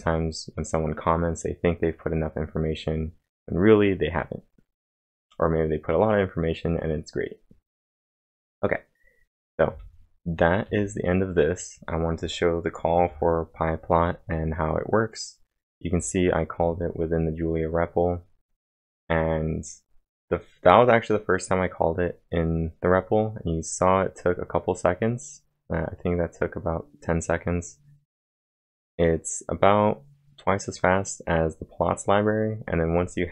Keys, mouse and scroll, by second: 0.0-0.4 typing, 7.6-8.3 typing, 7.8 click, 9.4-10.2 typing, 9.7 click, 12.8-13.6 typing, 15.4-16.1 typing.